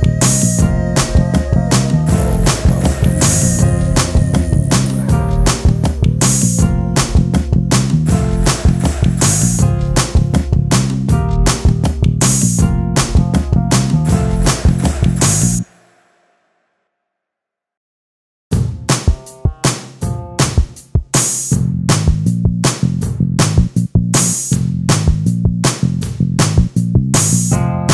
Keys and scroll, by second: 18.9 t, 21.8 t, 26.7 ctrl+space, 27.1 j.